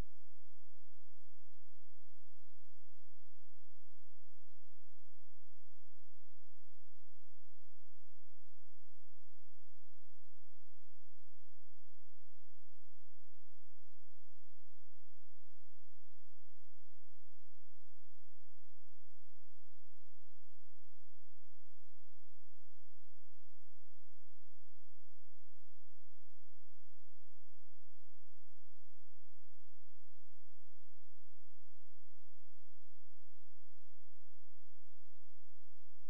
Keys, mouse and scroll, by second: 0.5-1.4 scroll down 1, 1.4 click, 3.2-4.5 scroll up 1, 4.5 scroll down 1, 4.7-5.3 scroll up 1, 5.5 ctrl+z, 9.4 click, 10.0 scroll down 1, 10.3-12.1 scroll up 1, 14.3 click, 23.3 space, 23.6 click, 27.8 right click, 30.6 F12, 31.9 click.